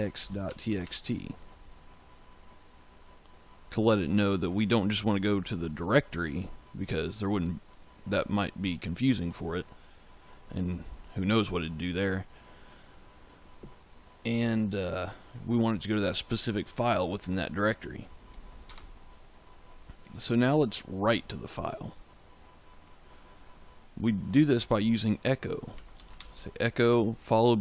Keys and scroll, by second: 0.0-1.2 typing, 18.6 Return, 25.4-26.7 typing.